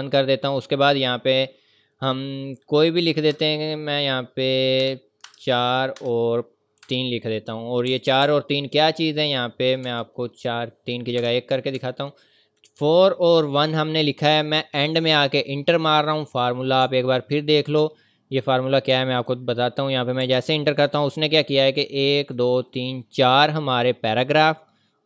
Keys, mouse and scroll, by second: 3.3 Left, 3.3 KP_8, 4.8 BackSpace, 5.2 KP_4, 6.0 ,, 6.8 KP_3, 7.9 Right, 9.8 Left, 10.4 BackSpace, 11.2 KP_1, 11.7 Right, 16.8-17.1 scroll up 1, 17.9-18.3 ctrl+scroll down 1, 18.4 scroll down 1, 19.1 click, 20.2 Return, 21.8 click.